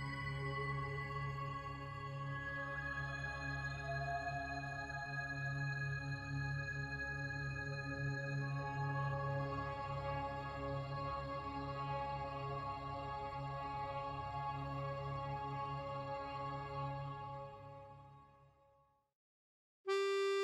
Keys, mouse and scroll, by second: 7.6 click.